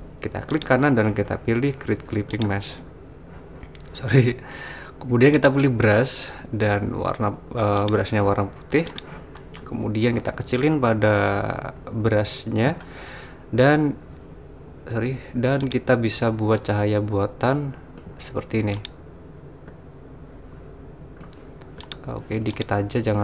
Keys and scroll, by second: 10.3-11.9 typing, 14.7-15.1 typing.